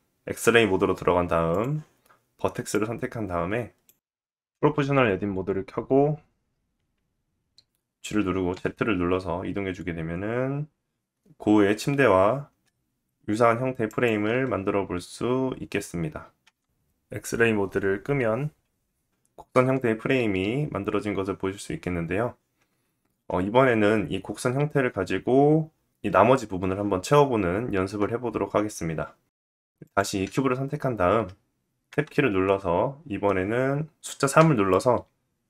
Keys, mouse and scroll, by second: 1.4-16.3 drag, 4.3 w, 4.4 w, 6.7 g, 16.3-29.4 middle drag, 29.4 click, 29.5-35.4 middle drag, 31.4 Tab, 34.0 3.